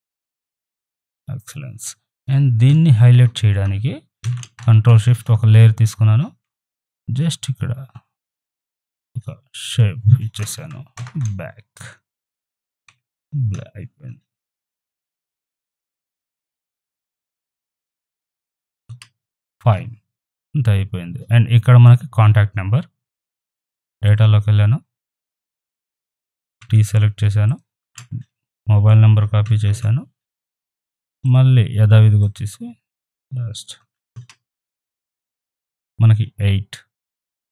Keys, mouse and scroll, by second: 2.7 b, 4.2 ctrl+shift+n, 5.1 Return, 6.4-8.6 typing, 9.6 click, 12.9 ctrl+[, 14.8 ctrl+t, 16.2-20.9 alt+drag, 24.1 click, 26.6 t, 27.5 click, 27.8 ctrl+a, 29.5 ctrl+c, 31.2 click, 33.8 ctrl+v, 37.2-37.5 drag.